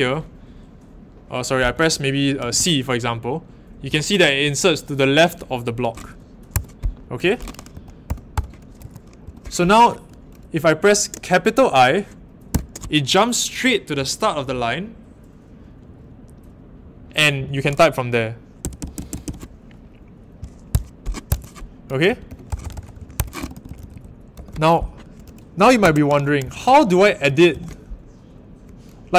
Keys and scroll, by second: 1.6 BackSpace, 2.3 c, 6.5 Escape, 7.7-9.2 typing, 8.8 Escape, 18.6-19.2 typing, 21.2 Escape, 21.8-24.8 typing, 23.1 Escape, 25.8-27.4 typing.